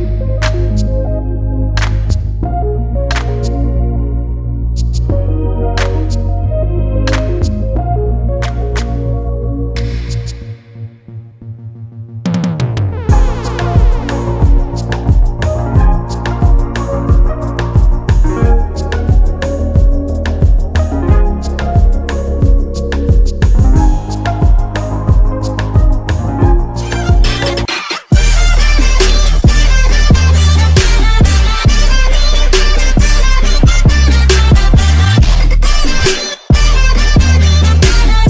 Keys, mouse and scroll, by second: 0.5 scroll down 1, 1.7 click, 3.0 scroll up 1, 3.7 click, 7.0 scroll up 1, 7.4 click, 13.2 scroll down 1, 14.3 click, 14.7 scroll down 1, 15.4 click, 19.0 click.